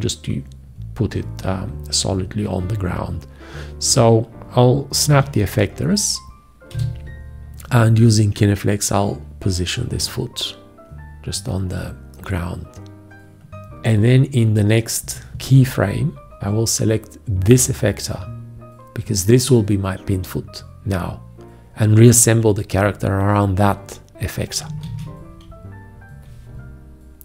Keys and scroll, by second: 5.1 `, 24.9 ctrl+`.